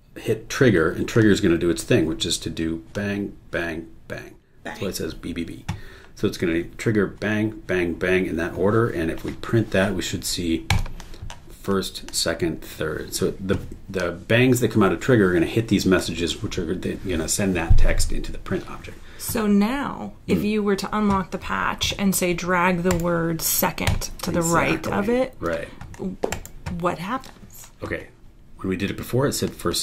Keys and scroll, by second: 22.9 super+e, 26.3 super+e.